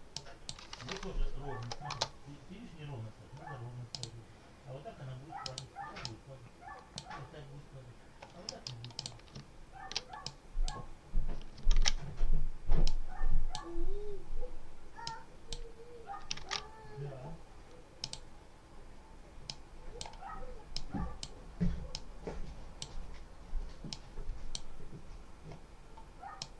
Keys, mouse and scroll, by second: 0.0 click, 1.5 4, 1.8 0, 3.8 click, 5.3 click, 5.9 click, 8.3 middle click, 8.9 click, 9.3-9.8 ctrl+scroll up 2, 10.1-10.7 ctrl+drag, 11.6 ctrl+z, 12.7-13.6 drag, 14.9-15.6 drag, 17.9 click, 20.6 click, 21.8 click, 23.8 click, 26.3 click.